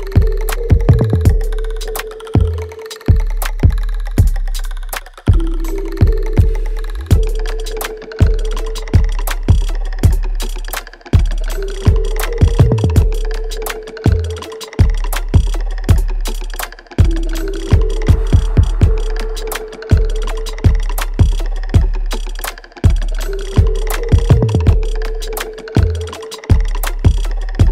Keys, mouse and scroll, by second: 0.2 alt+middle click, 0.8 right click, 2.0 ctrl+s, 4.3 alt+click, 5.2-7.0 right drag, 7.0 click, 8.1 Caps_Lock, 8.2 click, 8.7 click, 9.7 click, 10.6 click, 11.1 Caps_Lock, 11.1 click, 11.2 Caps_Lock, 12.0 click, 13.1 Tab, 17.2 shift+click, 20.0 alt+right click, 20.5-23.3 alt+drag, 23.3 alt+right click, 23.8 alt+click, 24.4 alt+middle click, 25.1 alt+right click, 26.0 alt+middle click, 26.6 alt+right click, 27.3 alt+middle click.